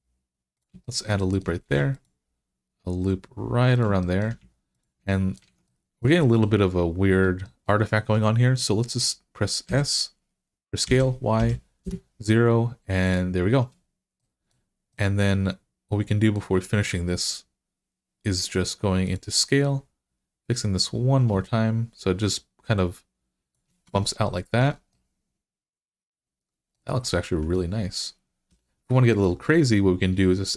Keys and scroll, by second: 1.5 ctrl+r, 5.3 alt+z, 9.5 s, 10.7-11.2 typing, 11.7 Return, 23.7 Tab, 27.2 Tab, 28.3 3.